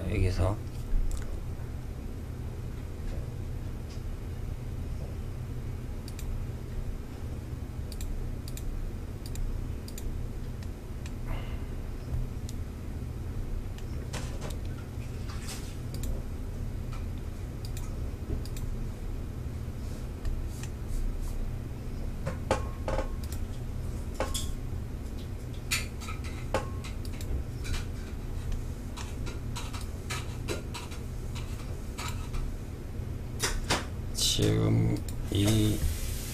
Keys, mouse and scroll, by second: 5.2 click, 7.0 click, 7.6 click, 8.4 click, 9.1 click, 9.7-10.5 middle drag, 10.5-11.7 scroll down 3, 13.0-15.1 middle drag, 15.1 click, 16.8 click, 17.6 click, 19.4 middle click, 20.0-21.6 scroll down 6, 22.4 click, 26.2 click, 27.6-29.0 middle drag, 29.0-32.0 drag, 34.1 click.